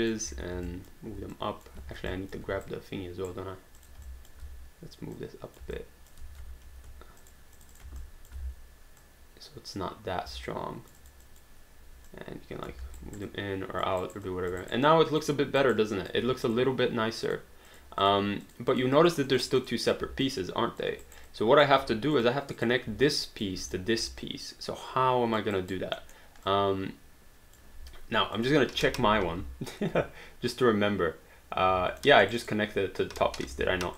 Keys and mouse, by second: 0.3 w, 0.7 alt+click, 1.4 click, 1.9 ctrl+z, 2.1 alt+click, 2.5 q, 2.7 right click, 3.8 click, 4.1 alt+click, 4.4 w, 5.2 click, 5.7 alt+click, 6.3 ctrl+z, 6.7 q, 7.2 shift+click, 8.1 alt+click, 8.4 w, 9.0 click, 10.3 alt+click, 12.1 click, 13.0 alt+right click, 13.3 alt+click, 14.0 alt+right click, 14.2 alt+click, 14.6 alt+right click, 14.9 alt+click, 15.6 alt+right click, 16.0 alt+click, 16.5 click, 20.3 alt+click, 21.0 alt+right click, 21.3 alt+click, 22.1 click, 23.2 alt+click, 23.7 click, 24.2 alt+click, 25.6 alt+right click, 26.0 alt+middle click, 26.4 alt+click, 28.3 click, 29.1 h, 32.0 alt+middle click, 32.3 alt+right click, 33.2 h.